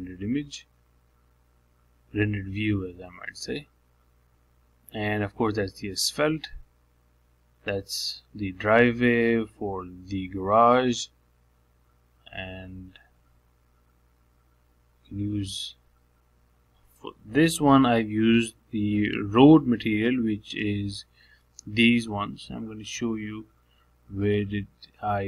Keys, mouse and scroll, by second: 0.5-1.7 scroll down 8, 1.7 middle click, 2.6-3.3 scroll up 2, 3.3-5.2 drag, 9.8-12.5 shift+middle drag, 12.5-12.8 scroll down 3, 12.8-15.9 middle drag, 16.2-18.2 drag, 20.2 middle click, 21.2 scroll down 2, 21.4 middle click, 22.0 scroll up 1, 22.3 middle click, 24.7-25.2 drag.